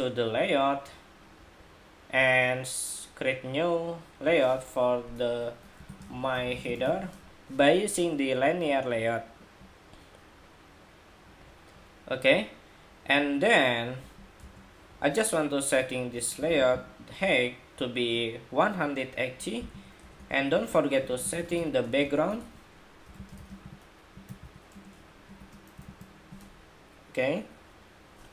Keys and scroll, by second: 25.5 super+v.